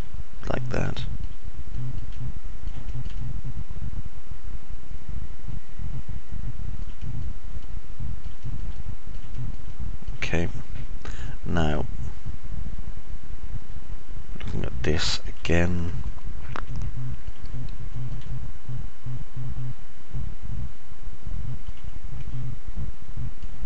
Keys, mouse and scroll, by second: 0.0 alt+click, 0.0 alt+middle click, 0.0 alt+right click, 1.3 click, 1.3 middle click, 1.3 right click, 2.7 click, 2.7 middle click, 2.7 right click, 3.0 alt+click, 3.0 alt+middle click, 3.0 alt+right click, 4.0-7.7 alt+middle drag, 4.0-4.8 alt+scroll up 1, 7.8 middle click, 8.3 alt+middle click, 9.2 middle click, 9.7 alt+middle click, 9.8 alt+click, 9.8 alt+right click, 10.2 click, 10.2 middle click, 10.2 right click, 10.7 alt+click, 10.7 alt+middle click, 10.7 alt+right click, 12.7-16.0 alt+middle drag, 16.7 middle click, 17.7 alt+middle click, 18.8-22.7 middle drag, 23.0 click, 23.0 middle click, 23.0 right click.